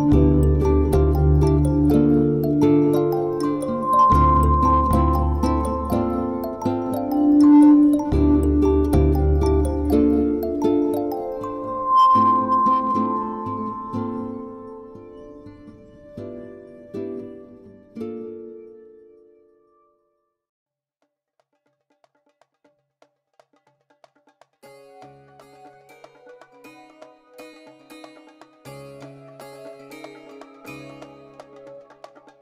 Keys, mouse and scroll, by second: 1.7 ctrl+r, 4.4 click, 5.5 middle click, 8.9 ctrl+r, 12.1 right click, 12.5 ctrl+r, 13.4 right click, 14.0 ctrl+r, 14.5 right click, 14.8 middle click, 15.5 ctrl+r, 16.0 right click, 16.7 ctrl+r, 17.2 right click, 17.9 ctrl+r, 18.5 right click, 18.7 middle click, 19.3 ctrl+r, 19.8 right click, 20.4 ctrl+r, 20.8 right click, 21.0 middle click, 23.2 click, 24.2 click, 24.8 click, 25.0 shift+click, 26.7 click, 27.5 shift+click, 28.0 shift+click, 28.4 shift+click, 28.7 shift+click, 28.8 shift+click, 29.3 shift+click, 29.7 shift+click, 29.9 shift+click, 30.2 shift+click, 30.4 shift+click, 30.5 shift+click, 30.8 shift+click, 30.9 shift+click, 31.5 shift+click, 31.5 middle click, 32.0 shift+click, 32.3 shift+click.